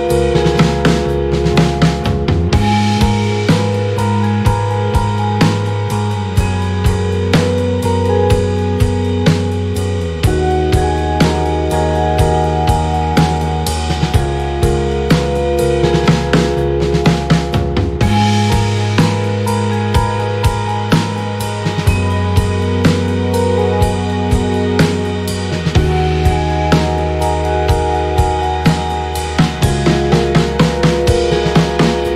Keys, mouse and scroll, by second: 2.1 click, 2.7-4.4 ctrl+drag, 4.5 ctrl+click, 4.9 ctrl+click, 5.7 shift+Right, 7.2 click, 7.9 shift+click, 8.8 click, 9.5 click, 10.3 click, 11.0 click, 11.7 click, 12.6 click, 13.9 Up, 14.9 ctrl+d, 15.7 shift+click, 17.0 shift+click, 17.5 shift+click, 18.5 ctrl+shift+click, 18.9-22.3 ctrl+shift+drag, 23.2 click, 24.1 ctrl+d, 25.6 ctrl+d, 26.9 shift+click, 28.1 ctrl+KP_Multiply, 29.5 click, 30.1 shift+click.